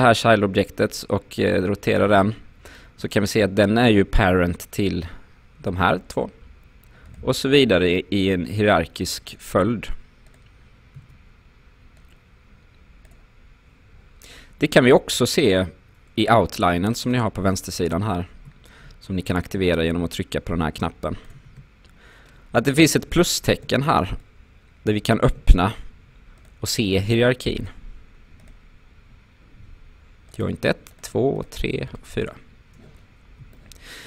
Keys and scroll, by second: 11.0 w.